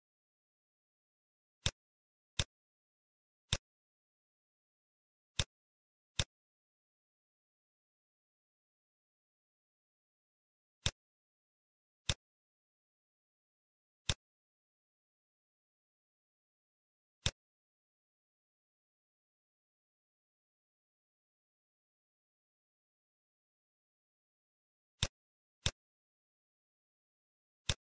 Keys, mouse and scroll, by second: 1.5 click, 2.8 middle click, 3.5 click, 4.3 shift+d, 6.0 click, 12.0 click, 14.0 click, 15.5-15.9 scroll down 2, 15.9 middle click, 17.0 click, 17.1 click, 21.3-21.8 scroll up 3, 22.9 scroll down 2, 24.0 KP_7, 24.9 click, 25.5 click, 26.5 shift+d.